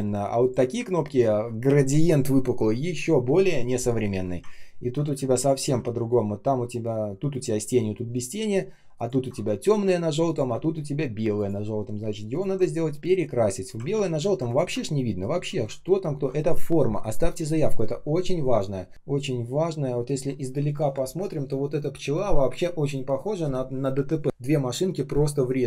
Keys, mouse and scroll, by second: 1.0 ctrl+scroll down 1, 4.7 ctrl+scroll down 1, 5.0 space, 5.5 space, 8.9 ctrl+click, 10.2 ctrl+click, 12.7 space, 13.2 space, 13.2 space, 13.8 ctrl+z, 15.2 ctrl+z, 19.2 shift+0.